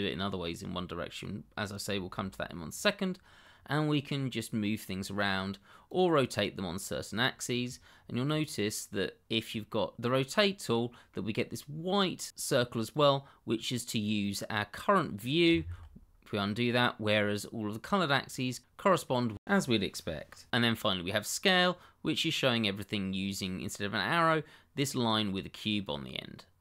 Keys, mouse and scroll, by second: 3.1-3.4 scroll down 1, 3.4 middle click, 4.4 click, 10.4-10.7 scroll down 1, 10.7 middle click, 12.9 click, 15.6 ctrl+z, 18.1-18.6 scroll down 1, 18.6 click, 21.4 click, 21.9-23.8 scroll up 1, 25.8 click.